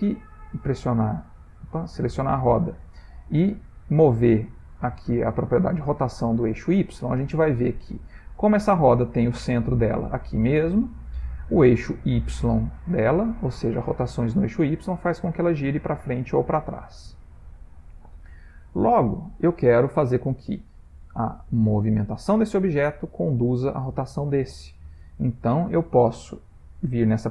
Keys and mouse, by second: 0.1 click, 2.7 click, 4.0 click, 8.3 Escape, 8.7-11.2 ctrl+middle click, 9.4 middle click, 11.1 middle click, 11.6 middle click, 11.7 middle click, 14.0 click, 18.7 ctrl+middle click, 19.5 middle click, 19.6 middle click, 20.4 click, 21.6 click, 23.7 click.